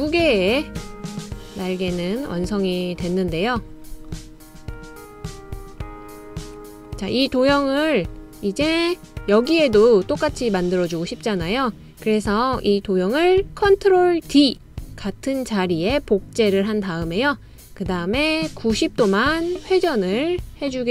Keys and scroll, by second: 15.3 super+d.